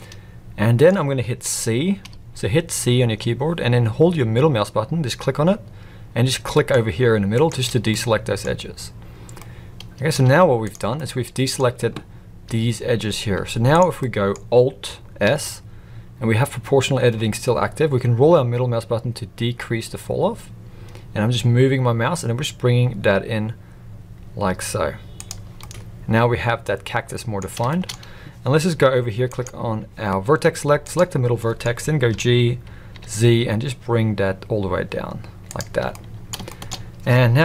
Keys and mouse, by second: 2.0 c, 7.9 middle click, 9.4-10.1 middle drag, 10.2 z, 11.0 middle click, 14.0 middle click, 14.0 z, 15.2 alt+s, 25.6-27.4 middle drag, 27.6 shift+middle drag, 29.3 click, 31.4 middle click, 32.1 g, 35.9-36.3 middle drag, 36.5 shift+middle click.